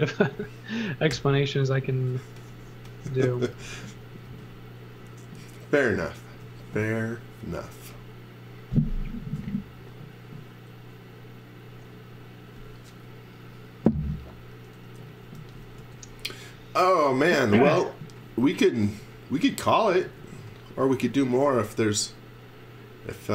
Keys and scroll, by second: 1.1 g, 3.3 x, 3.6 v, 6.3 x, 15.3-18.9 typing, 20.0 space.